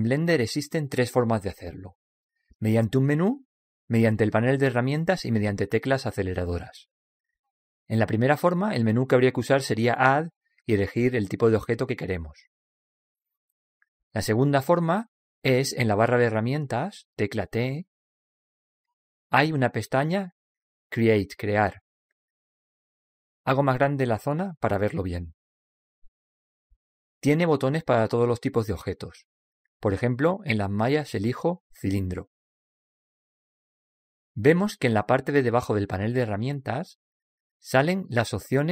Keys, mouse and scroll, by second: 12.6 click, 13.4 click, 13.6 click, 13.8 click, 14.1 click, 18.2 t, 21.7-25.2 drag, 30.2 click, 33.0-34.8 drag, 34.5-34.9 typing, 35.5-38.6 drag.